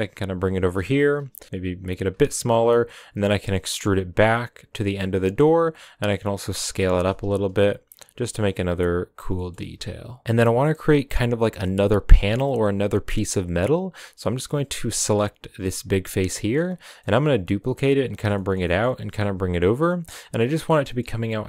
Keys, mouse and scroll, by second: 1.1 KP_1, 1.4 s, 2.2 middle click, 2.7 e, 5.2 middle click, 5.4 scroll up 1, 5.5 s, 6.7 middle click, 7.0 s, 8.3 right click, 8.7 s, 9.3 middle click, 9.5 s, 10.2-12.7 middle drag, 12.7 scroll down 1, 12.8-14.8 middle drag, 14.8 right click, 15.6-16.8 middle drag, 16.8 scroll up 2, 17.0 middle click, 17.3 shift+d, 18.3 middle click, 18.6 g, 19.8 middle click, 20.1-20.4 scroll up 2, 20.4 g.